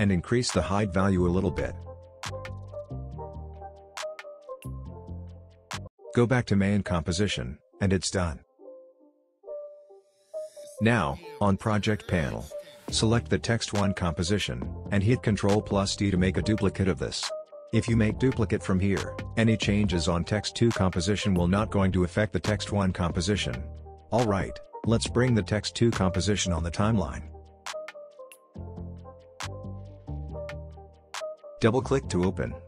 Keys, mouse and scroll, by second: 7.6-9.1 scroll down 1, 9.1-9.7 scroll up 1, 9.7-10.7 scroll down 1, 10.7 click, 14.6 ctrl+d, 24.4-28.3 drag.